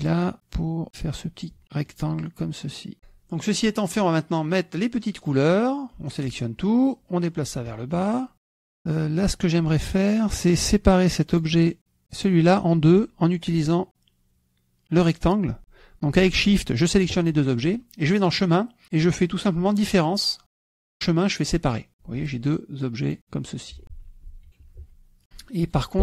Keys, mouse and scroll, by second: 0.9 click, 2.5 shift+click, 2.9 shift+KP_Subtract, 4.4 click, 6.1-7.3 drag, 8.1 ctrl+click, 9.1 ctrl+click, 10.6 click, 11.3 click, 12.1 click, 13.1 click, 17.2 shift+click, 21.6 click, 22.5 click, 23.1 click, 24.1 click, 24.5 ctrl+z.